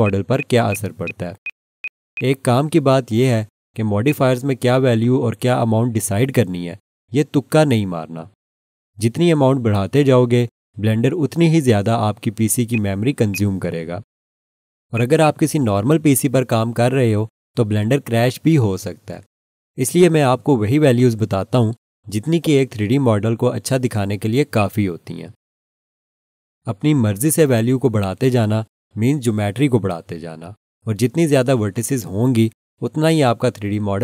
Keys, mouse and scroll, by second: 4.0 click, 12.7 click, 15.2 double click, 22.2 scroll down 1, 24.5 alt+shift+click.